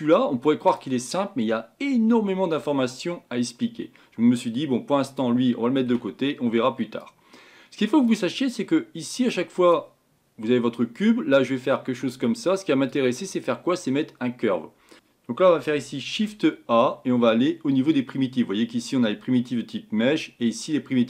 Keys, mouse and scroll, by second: 5.9 Delete, 9.7 click, 15.2 click, 15.2 click.